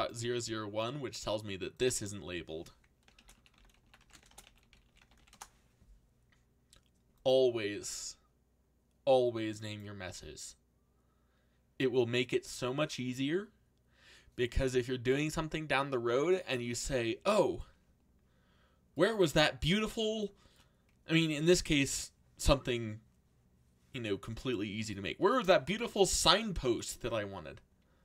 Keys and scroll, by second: 2.9-5.6 typing.